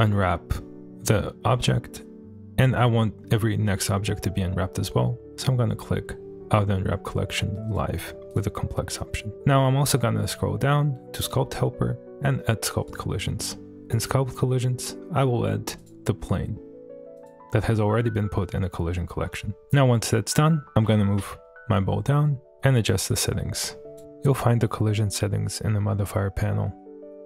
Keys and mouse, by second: 3.7 middle click, 7.7 click, 8.3 click, 9.9 click, 12.8 click, 14.3 middle click, 15.8-17.3 drag, 19.6-20.6 middle drag, 20.8 g, 21.3 z, 23.0-24.1 drag, 24.3 click, 25.5 click, 26.4 click.